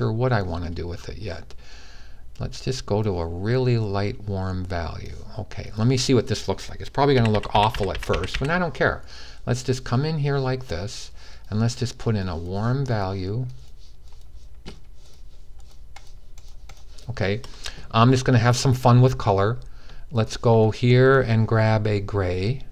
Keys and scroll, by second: 6.8-8.0 typing.